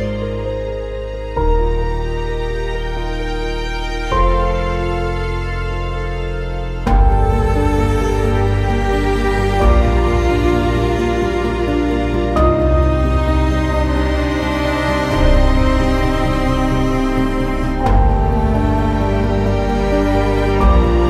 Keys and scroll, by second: 4.2 w, 15.1 q, 17.3 Delete, 17.9 ctrl+z, 19.4 Delete.